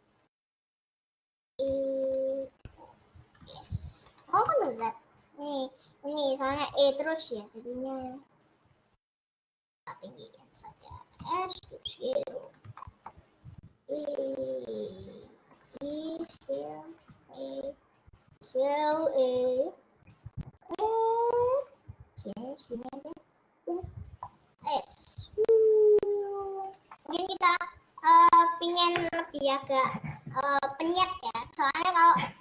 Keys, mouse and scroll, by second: 1.5 e, 3.6 e, 4.4 ctrl+z, 8.8 ctrl+z, 9.9 Left, 11.3 s, 13.2 middle click, 13.6 e, 15.8 e, 16.4 s, 17.0 e, 18.4 s, 18.9 e, 21.3 e, 25.1 s, 27.1 middle click, 27.3 scroll down 2, 28.1-28.7 scroll down 1.